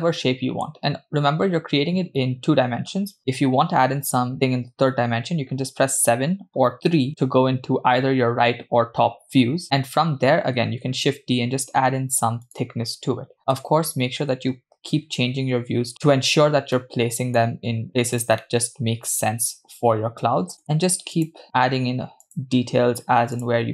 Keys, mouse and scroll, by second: 3.2 KP_7, 7.0 KP_3, 9.5 KP_7, 10.4 KP_3, 10.7 shift+d, 13.8 KP_1, 15.9 g, 16.8-17.4 middle drag, 17.9 g, 18.5-20.5 middle drag, 20.5 KP_3, 20.5 KP_1, 20.6 shift+d, 21.4 s, 23.4 click.